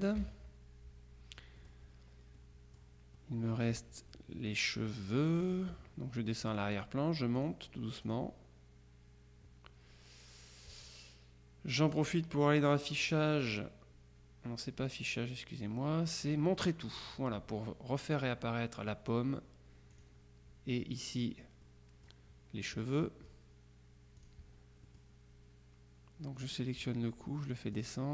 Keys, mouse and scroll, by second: 0.3 KP_Subtract, 1.7 click, 2.5 click, 4.2 click, 5.4 click, 6.5 click, 7.4 click, 8.1 click, 11.9 click, 17.2 click, 20.0 click, 21.7 click, 24.3 click, 24.9 click, 26.4 click, 27.8 click.